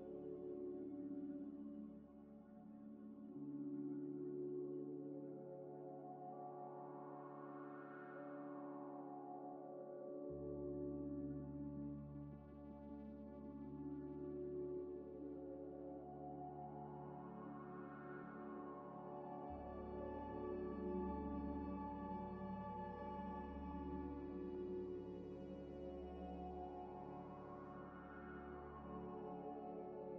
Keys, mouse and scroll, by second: 1.4 shift+click, 2.2 ctrl+-, 3.5-6.5 typing, 7.9 g, 8.0 x, 10.0 ctrl+a, 10.6 scroll up 1, 11.0 scroll down 1, 11.2 middle click, 11.4 scroll up 1, 12.1 g, 12.3 y, 12.6 x, 14.2 Delete, 14.4 Delete, 14.5 scroll down 1, 15.1 scroll down 1, 15.1 shift+a, 17.1 Tab, 17.2 f, 17.5 e, 18.4 Tab, 18.7-27.0 typing, 19.4 KP_Enter, 19.8 Return, 22.5 scroll up 1, 27.7 scroll up 1, 29.9 scroll up 1, 29.9 middle click, 30.1 middle click.